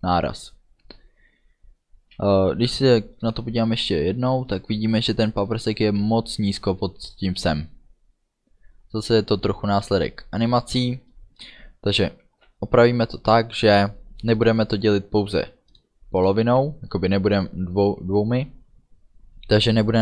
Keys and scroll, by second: 2.2 space, 8.9 space.